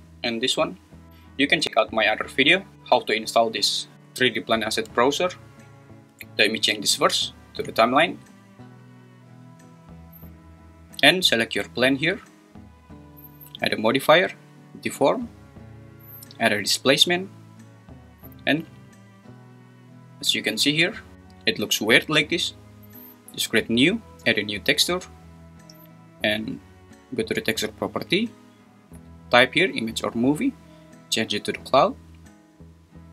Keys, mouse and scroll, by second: 0.6 click, 3.9 click, 7.1-8.0 drag, 8.6-9.7 drag, 13.8-16.9 drag, 25.0 click, 30.4-32.0 drag.